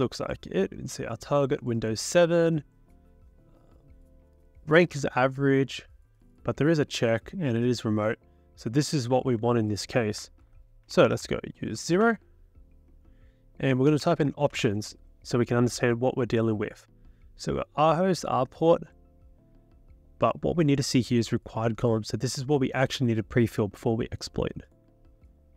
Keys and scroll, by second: 10.4 ctrl+l, 10.6-11.8 typing, 12.0 Return, 13.4-15.0 typing.